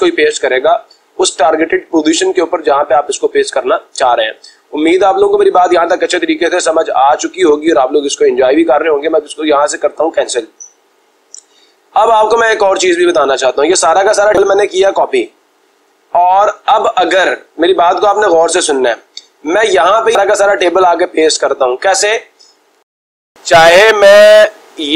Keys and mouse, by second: 10.3-11.3 drag, 14.8-15.8 drag, 16.5 click, 17.0 click, 18.4 click, 18.5 click, 18.7 click, 19.0 click, 20.5 click, 24.0 click.